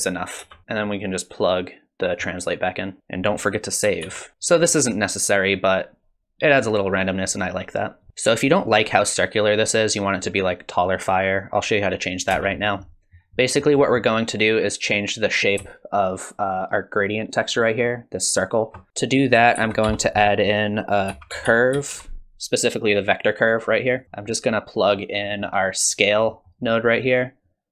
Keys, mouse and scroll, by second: 0.4 space, 0.6 middle click, 0.6 scroll down 3, 0.8 click, 2.9 click, 4.1 ctrl+s, 8.1 space, 12.3 space, 12.6 middle click, 13.4-13.9 scroll up 3, 13.8 middle click, 18.9 middle click, 18.9 click, 19.6 shift+a, 24.0 middle click, 24.1 middle click, 25.3 middle click, 26.3 middle click, 27.4 click.